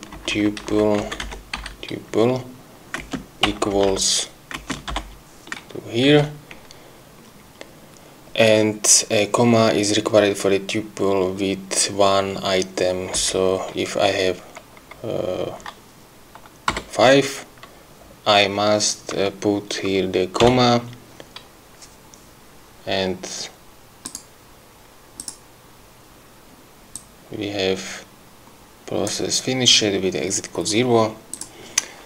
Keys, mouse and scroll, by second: 0.2 Left, 1.0 Right, 1.3 BackSpace, 1.6 End, 3.0 space, 3.5 =, 3.7 BackSpace, 4.6 space, 6.1 End, 13.2 BackSpace, 16.8 5, 24.2 click, 25.3 click, 27.0-29.4 drag, 31.4 click.